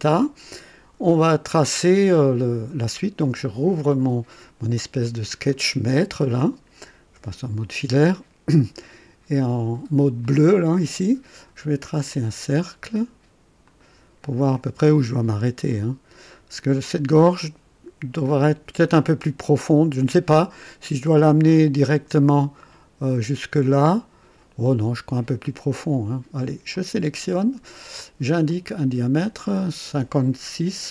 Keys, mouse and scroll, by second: 1.5-2.4 drag, 3.2 click, 5.3 click, 7.3 &, 8.0-8.7 right drag, 10.2 click, 11.8 click, 13.6 click, 15.6 click, 25.4 right click, 26.7 click, 28.4 click.